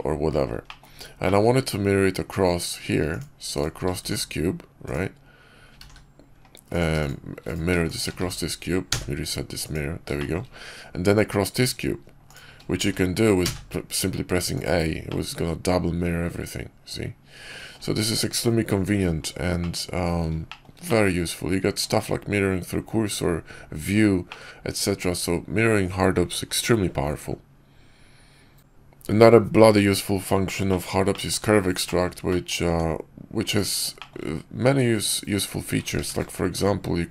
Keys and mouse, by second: 0.6 middle click, 1.1 click, 3.9 alt+x, 4.7-5.6 drag, 6.6 drag, 6.9-7.3 shift+drag, 7.7 shift+click, 8.1 alt+x, 9.5 click, 10.1 shift+click, 12.2 shift+click, 12.7 alt+x, 14.4 click, 15.0-17.7 middle drag, 19.5-19.9 middle drag, 20.4 shift+middle click, 20.7-21.1 middle drag, 24.2-25.5 middle drag, 28.5 a, 30.6 middle click, 31.0 shift+middle click, 31.7 shift+middle drag, 32.2 middle click, 32.6 Tab, 33.4 click, 33.8 shift+click, 35.8 q.